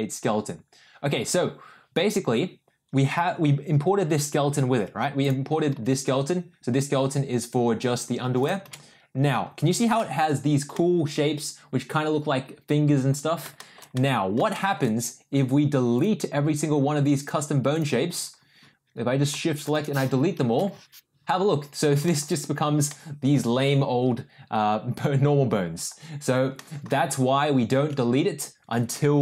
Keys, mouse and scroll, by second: 5.7 g, 9.0 ctrl+z, 9.9 shift+middle click, 10.7-12.9 middle drag, 13.5 shift+middle drag, 13.9-14.3 middle drag, 14.5 shift+middle click, 16.1 click, 17.7 click, 19.7 shift+click, 20.8 Delete, 22.0 middle click, 22.8-23.3 middle drag, 26.5 middle drag, 27.4 ctrl+z.